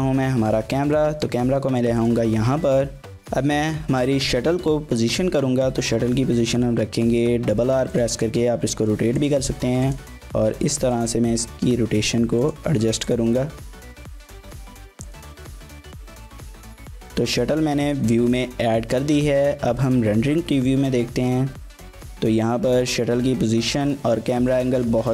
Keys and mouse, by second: 0.9 click, 1.6 g, 2.0 click, 3.0 g, 5.2 r, 5.4 r, 7.9 click, 8.2 r, 9.2 click, 9.3 g, 9.9 click, 10.1 r, 11.0 click, 11.3 r, 11.5 r, 12.4 click, 12.6 g, 13.1 click, 13.3 r, 13.4 r, 14.3 click, 14.5 s, 15.0 click, 15.2 g, 15.7 click, 16.6 g, 17.3 click, 17.4 s, 17.9 click, 18.0 g, 18.3 click, 22.1 click.